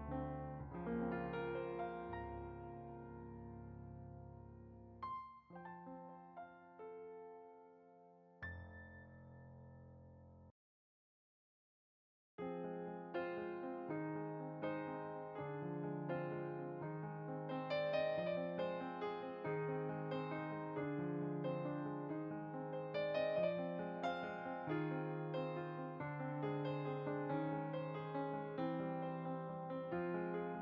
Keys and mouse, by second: 0.8 shift+f, 1.0 shift+click, 2.4 shift+f, 2.6 shift+click, 4.4 shift+middle click, 6.8 shift+click, 7.4 shift+middle click, 8.8 shift+right click, 9.0-11.0 middle drag, 11.1 middle click, 11.4 middle click, 11.7 middle click, 12.3 middle click, 18.2 click, 19.3 g, 19.8 click, 20.1 f, 20.3 click, 22.1 f, 22.3 click, 24.0 middle click, 24.7 f, 24.7 click, 25.4 middle click, 26.2 click, 29.2 click.